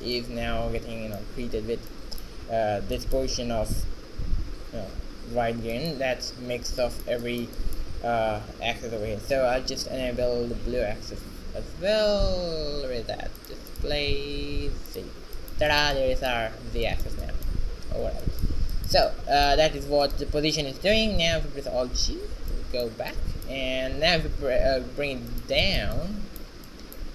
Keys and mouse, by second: 4.8 middle click, 5.8 middle click, 6.6 shift+z, 12.8 middle click, 13.5-17.0 drag, 17.0-18.1 middle drag, 18.1 shift+z, 20.1 shift+z, 20.5 q, 21.8 alt+g, 22.6 shift+z, 24.2 g.